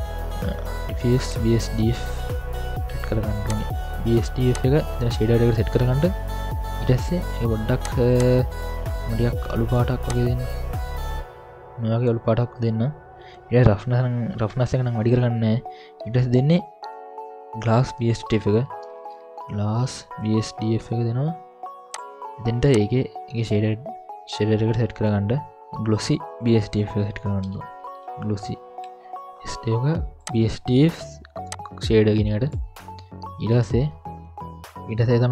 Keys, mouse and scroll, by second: 1.4 Down, 4.5-5.2 drag, 7.8 click, 11.0 click, 15.0 middle click, 18.2 ctrl+alt+a, 19.9 s, 22.7-23.6 drag, 27.1 ctrl+alt+a, 31.4-32.6 drag, 34.6 middle click, 34.6 scroll down 3, 34.8-35.1 scroll up 1, 35.1-35.3 scroll down 1.